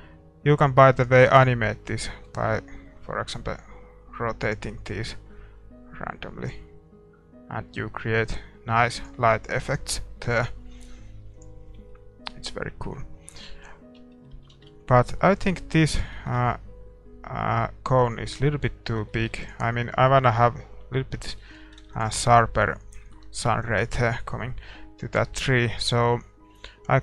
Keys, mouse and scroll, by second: 1.4-2.8 right drag, 2.4 r, 11.6-13.1 drag, 12.0-13.8 middle drag, 14.1-24.4 middle drag, 14.7 shift+z, 15.8-19.1 right drag, 21.5 ctrl+s, 23.0 ctrl+s.